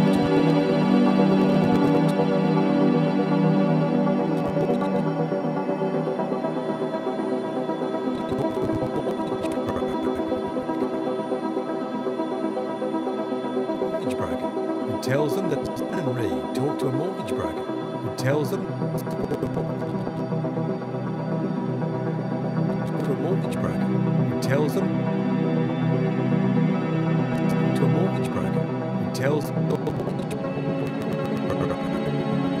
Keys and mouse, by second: 3.2 typing, 3.3 click, 4.2-5.7 drag, 5.7 typing, 7.2 click, 8.2-11.7 drag, 12.7 alt+g, 13.6-14.7 drag, 13.6 typing, 15.3-15.9 typing, 15.6 click, 18.5 typing, 18.9-20.4 drag, 20.5 shift+click, 21.2 shift+d, 21.9-23.5 drag, 22.9 space, 24.7-25.1 typing, 25.1 click, 26.6-27.5 typing, 26.9-29.3 drag, 29.3 typing, 29.7-32.6 drag.